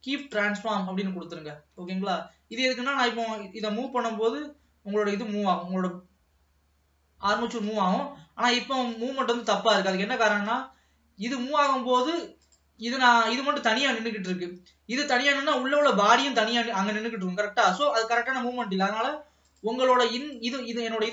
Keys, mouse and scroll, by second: 1.2 ctrl+s, 1.6-1.9 scroll down 2, 1.9 middle click, 2.6 click, 3.7 g, 9.0 ctrl+s, 9.4-10.8 middle drag, 10.8 ctrl+s, 12.5 click, 14.6-16.5 scroll up 1, 16.5-17.6 scroll up 1, 19.5 click, 20.2 click.